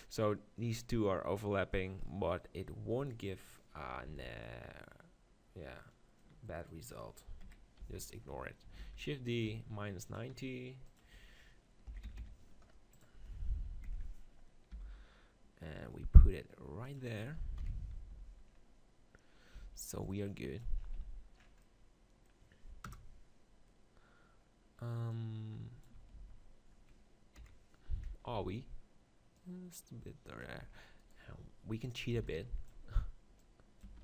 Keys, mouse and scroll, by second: 3.8 middle click, 4.1 z, 6.6 click, 7.5 KP_3, 7.8 z, 8.8 shift+d, 9.5 r, 10.9-12.7 drag, 14.5-16.9 middle drag, 14.7 g, 16.9-19.1 drag, 17.6 KP_7, 18.2 z, 19.6 z, 20.0-21.9 drag, 21.0 z, 22.9 KP_0, 26.2 ctrl+z, 27.4 KP_7, 28.3 z, 29.4-31.2 drag, 30.8 Tab, 31.0 right click, 32.1 b, 33.4 click, 33.9 Tab.